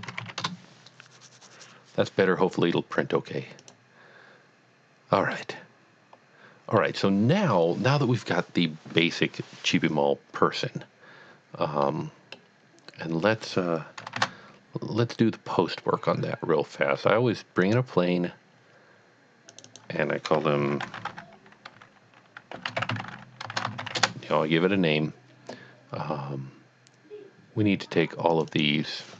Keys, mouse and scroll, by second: 0.0 KP_1, 0.1 KP_Decimal, 0.2 KP_5, 0.6 KP_Enter, 3.6 KP_Enter, 3.7 click, 5.3 middle click, 5.6 middle click, 11.3-11.8 scroll down 2, 11.8-12.5 middle drag, 14.1 shift+a, 17.7 click, 19.5 click, 19.7 double click, 20.5-21.2 typing, 22.5-24.3 typing, 28.3 click, 28.5 double click.